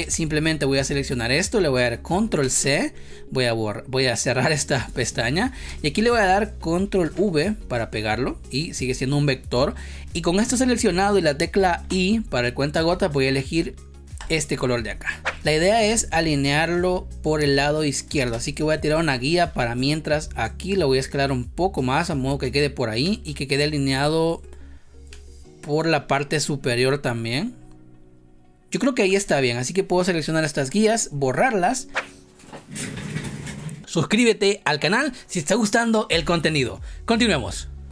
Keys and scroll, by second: 2.3 ctrl+c, 5.6 space, 6.9 ctrl+v, 15.3 space, 18.3 space, 30.5 Delete.